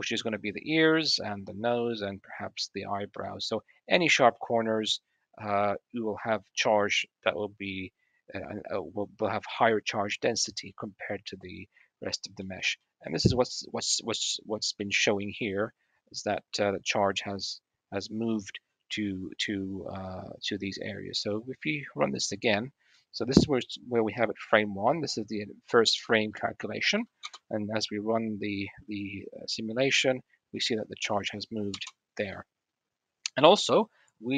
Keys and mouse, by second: 0.5 click, 1.7 click, 3.0-3.5 drag, 4.1-4.5 drag, 5.3 drag, 6.8 click, 6.9-10.5 middle drag, 10.5 drag, 10.7-12.2 middle drag, 12.2 click, 12.3-12.6 middle drag, 12.6-13.1 drag, 13.1 middle drag, 13.3 drag, 14.3 middle click, 15.3-15.7 drag, 16.5 middle click, 16.9 middle drag, 17.6-19.5 middle drag, 22.7-24.1 middle drag, 26.8 middle click, 27.0 space, 31.4 space, 32.1-33.2 middle drag.